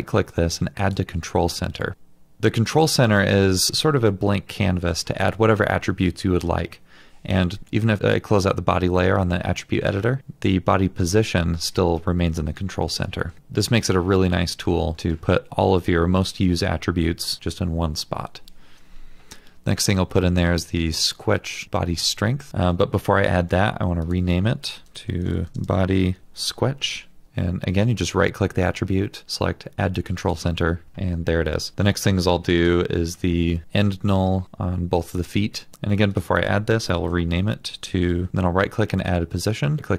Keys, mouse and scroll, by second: 21.6 right click, 22.5 ctrl+z, 24.8 Return, 25.1-25.9 typing, 26.2 Return, 27.9 right click, 32.5 double click, 36.9 Return, 37.2 click, 37.8 click, 37.9 click, 38.3 right click, 39.8 right click.